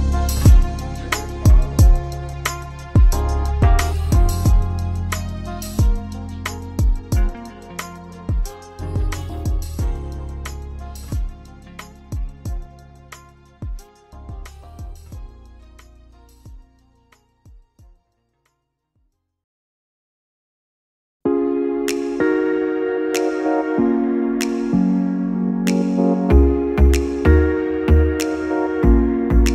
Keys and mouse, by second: 0.3 click, 1.0-5.4 middle drag, 5.4 click, 8.4 ctrl+z, 8.6 ctrl+z, 11.3 f, 14.2 ctrl+z, 15.5 ctrl+z, 23.3 Tab, 25.4 click, 25.6 click, 26.6 g.